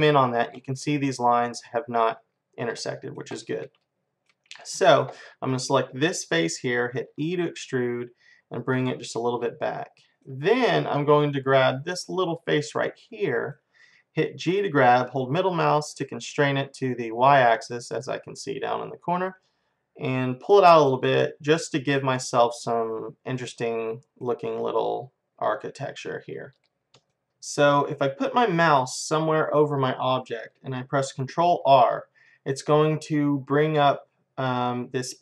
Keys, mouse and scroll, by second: 2.7-5.1 middle drag, 5.5-7.5 drag, 7.2 e, 7.5 middle click, 9.8-11.9 middle drag, 11.9-13.7 drag, 13.1-15.1 middle drag, 14.5 g, 21.0-22.9 middle drag, 23.4-25.3 middle drag, 26.7-28.2 middle drag, 31.7 ctrl+r.